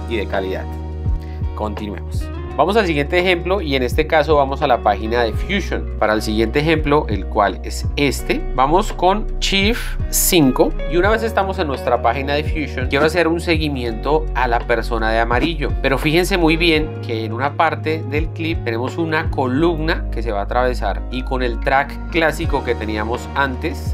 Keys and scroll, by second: 7.2 Up, 8.0 Down, 10.7 shift+5, 16.9 shift+Down.